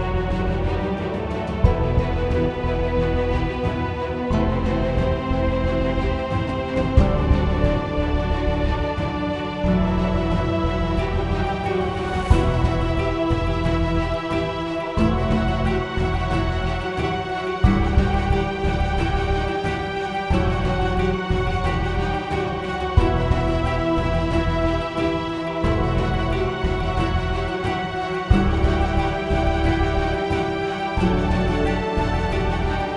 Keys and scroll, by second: 11.0-13.4 typing, 13.5 Return, 23.2-26.7 typing.